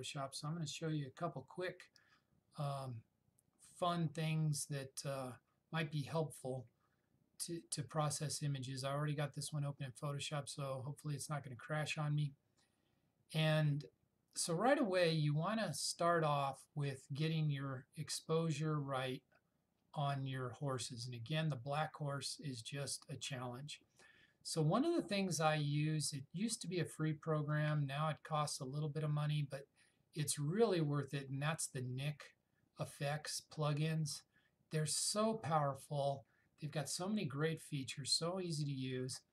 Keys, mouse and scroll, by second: 27.6-30.4 drag.